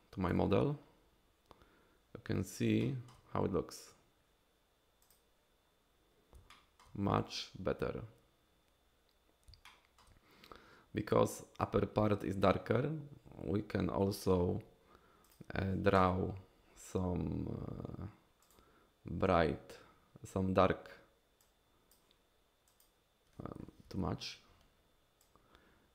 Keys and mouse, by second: 2.8 shift+click, 5.1 click, 6.5 shift+click, 9.7 shift+click, 15.3 click, 18.4 click, 21.4 click, 22.8 click, 23.9 ctrl+z, 25.2-25.9 drag.